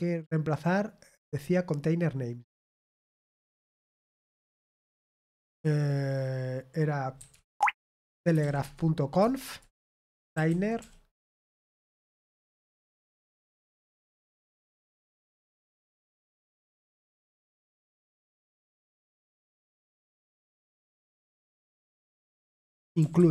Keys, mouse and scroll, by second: 2.6 click, 7.9-12.0 typing, 9.1 Return.